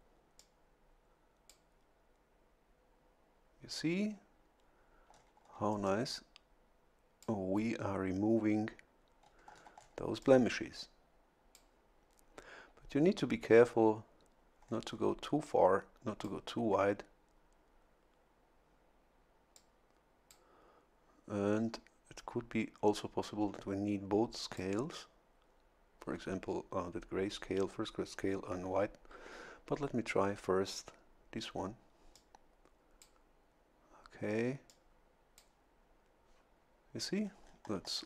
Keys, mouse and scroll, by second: 0.4-1.7 drag, 5.1 scroll down 2, 5.9-7.4 drag, 9.2 scroll down 1, 10.2-11.7 drag, 14.6-15.2 scroll up 1, 15.4-16.4 drag, 19.5 click, 23.2-24.8 drag, 32.1-33.2 drag, 34.7 click, 37.2-38.0 scroll up 1.